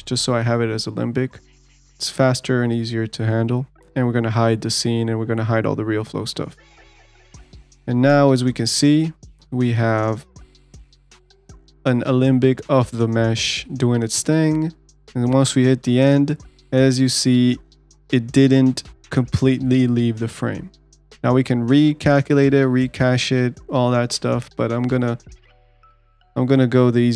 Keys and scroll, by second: 2.9 ctrl+z.